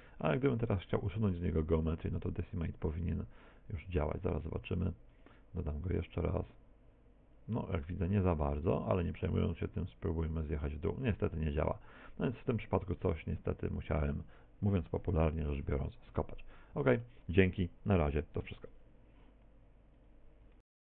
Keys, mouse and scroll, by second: 0.1 middle click, 4.4 click, 8.3 click, 10.8 click, 12.5 middle click, 15.2 middle click, 15.9 middle click.